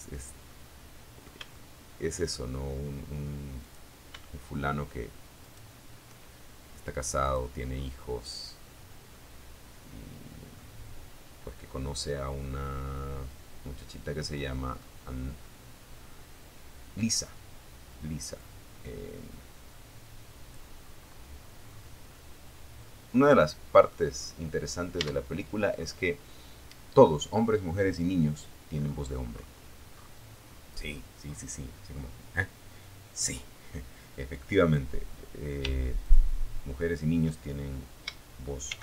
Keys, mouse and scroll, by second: 1.8 click, 3.6 shift+right click, 5.4 click, 5.9 scroll down 2, 6.7 scroll down 1, 7.3-8.8 middle drag, 9.6-10.0 scroll down 1, 10.0 scroll up 1, 10.1 scroll down 1, 10.6-13.2 middle drag, 13.2-14.3 scroll up 2, 16.6-18.9 drag, 19.0-19.5 scroll down 1, 19.9-20.3 scroll down 1, 20.3-22.2 middle drag, 22.4 scroll down 2, 23.3 Tab, 23.9-24.3 scroll down 2, 26.0-26.6 scroll down 2, 26.9-27.3 scroll up 2, 27.5-28.4 scroll up 3, 28.6-29.7 scroll down 1, 30.1 scroll up 1, 32.8 right click, 34.2 shift+click, 36.8 shift+d, 37.7 shift+Return.